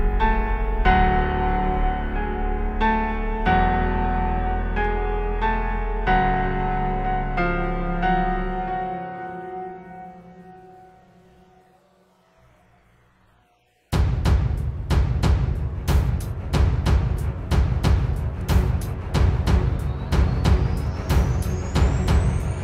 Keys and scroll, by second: 3.8 space, 4.8 super+space, 16.1 space, 16.6 alt+super+space, 18.6 space.